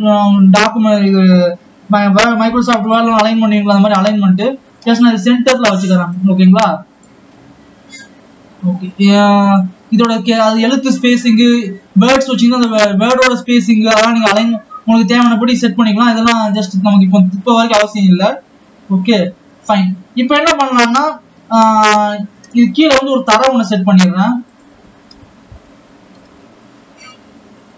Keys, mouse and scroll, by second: 5.3-6.0 drag, 8.0-8.7 scroll up 2, 9.2 scroll down 3, 11.2-11.6 scroll down 8, 15.2-17.0 scroll down 3, 17.0 click, 17.8 ctrl+s, 19.8 click, 20.5-22.2 scroll up 3, 22.2 click, 23.0 scroll down 3, 23.8 shift+a, 25.6 s, 27.3 s.